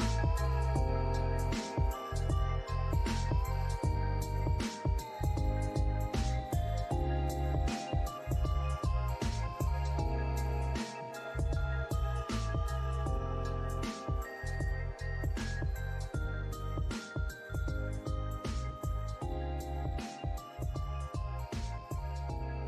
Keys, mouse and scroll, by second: 0.0 alt+middle click, 2.3 alt+click, 6.5 double click, 6.7 scroll down 1, 7.2 alt+middle click, 7.5 alt+click, 10.3 middle click, 12.1 scroll down 1, 13.8 scroll down 1, 14.2 alt+middle click, 16.4 scroll up 1, 16.8 alt+middle click, 17.7 alt+middle click, 18.0 alt+scroll up 1, 18.5 scroll down 1, 20.2 middle click, 20.8 alt+click, 21.7 alt+middle click, 22.4-22.6 scroll down 1.